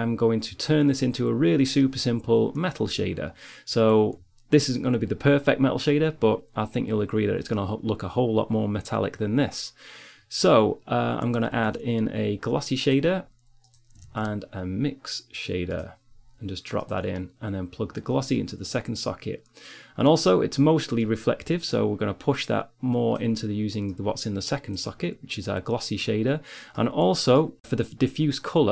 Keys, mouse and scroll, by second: 0.9 click, 11.3 shift+a, 14.3 shift+a, 18.0-19.2 drag, 20.6-22.0 middle drag, 22.4 middle click, 24.0-26.3 drag, 27.1 middle click.